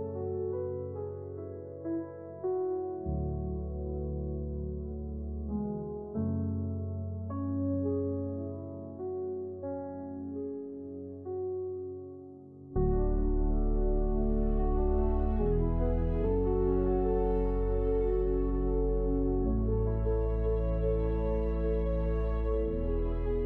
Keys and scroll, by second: 0.4 Escape, 1.4 shift+x, 4.5-5.5 typing, 11.6 Return, 12.9 j, 14.4-15.4 typing, 17.3 Tab, 20.5 Return, 21.8 j.